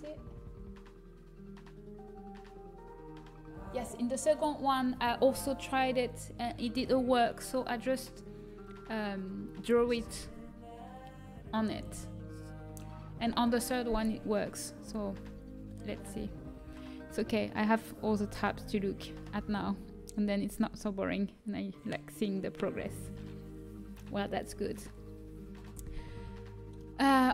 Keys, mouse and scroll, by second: 26.7 middle click.